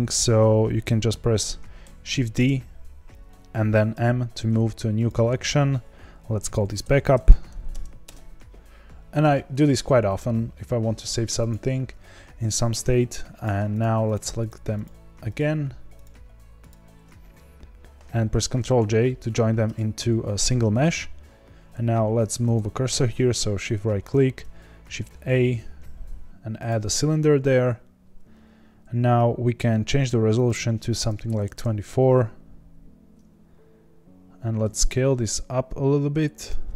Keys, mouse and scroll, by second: 1.8 shift+d, 8.0 Return, 11.3 click, 13.8 shift+Left, 14.1 shift+Left, 14.8 shift+Left, 15.3 shift+Left, 16.0 shift+click, 16.6 shift+click, 18.6 ctrl+j, 19.6 Tab, 20.4 Tab, 22.4-26.6 shift+right drag, 26.6 shift+a, 31.5-34.7 drag, 34.7 s.